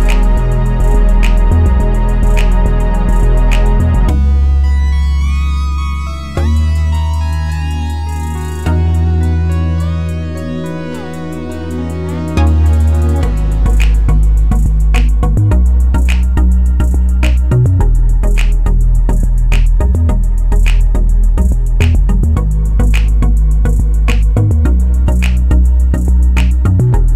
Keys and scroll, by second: 4.0 6, 4.2 0, 4.6 Return.